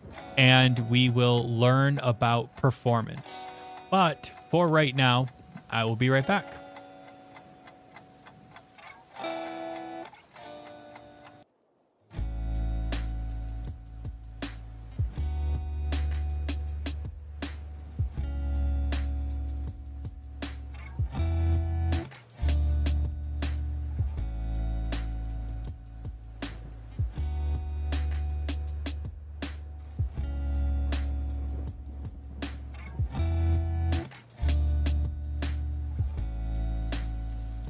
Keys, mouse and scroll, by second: 7.1 middle click, 8.0 click, 8.2 shift+click, 8.2 shift+click, 9.0 click, 9.1 middle click, 9.1 scroll, 9.3 shift+click, 9.4 Delete, 9.9 click, 10.3 click, 10.5 click, 10.6 shift+click, 11.0 shift+click, 11.3 click, 11.7 middle click, 12.0 click, 12.7 click, 12.8 middle click, 13.0 middle click, 13.1 shift+middle click, 13.1 shift+middle click, 13.2 middle click, 13.4 middle click, 13.6 middle click, 14.3 click, 15.2 click, 15.4 click, 15.9 click, 16.2 click, 16.6 click, 17.3 click, 17.5 middle click, 17.9 middle click, 18.1 middle click, 18.1 middle click, 18.4 middle click, 19.3 click, 19.9 middle click, 21.0 click, 21.6 click, 21.8 middle click, 21.8 middle click, 21.9 middle click, 22.0 shift+middle click, 22.0 shift+middle click, 22.3 middle click, 22.4 middle click, 22.7 middle click, 23.2 click, 23.3 middle click, 23.5 middle click, 23.9 middle click, 24.2 scroll, 24.9 click, 25.2 click, 25.4-27.1 scroll, 28.1 middle click, 28.4 middle click, 28.9 click, 29.0 click, 29.4 click, 29.5 click, 30.0 click, 30.9 middle click, 31.2 click, 31.9 click, 32.2 middle click, 32.3 scroll, 32.5 shift+middle click, 32.9 click, 33.6 shift+middle click, 33.6 click, 34.0 click, 34.3 middle click, 34.4 middle click, 34.4 middle click, 34.5 middle click, 35.3 click, 35.8 click, 36.0 click, 36.4 click, 36.5 click, 36.7 click, 36.7 click, 36.8 click, 37.0 click, 37.1 click, 37.5 click.